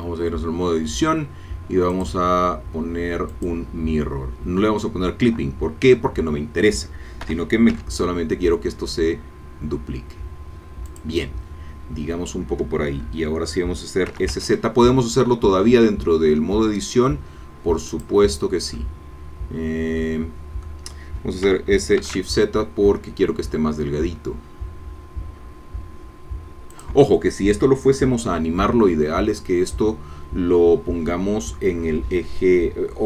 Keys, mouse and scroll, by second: 1.9 click, 3.3 click, 7.2 g, 7.7 x, 10.9 click, 14.1 s, 14.3 z, 17.9 click, 18.4 scroll down 2, 18.7-21.4 middle drag, 21.4 s, 22.0 shift+z, 26.7 click.